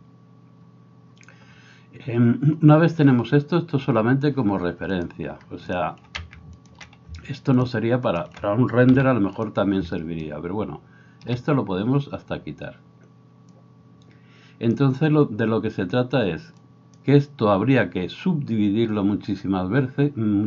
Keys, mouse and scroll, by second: 0.1-3.3 scroll up 1, 3.3-3.9 scroll up 1, 3.9 scroll up 1, 4.0-5.1 drag, 4.0-5.1 middle drag, 4.0-14.0 right drag, 6.6 ctrl+click, 6.6 ctrl+middle click, 7.6 shift+click, 8.1 shift+click, 8.1 shift+middle click, 9.1 g, 13.5-20.4 drag, 13.5 middle click.